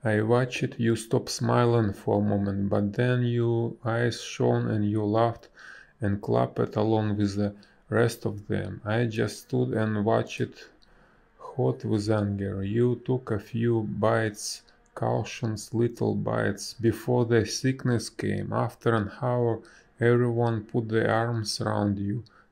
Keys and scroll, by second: 2.1 space, 10.5 space.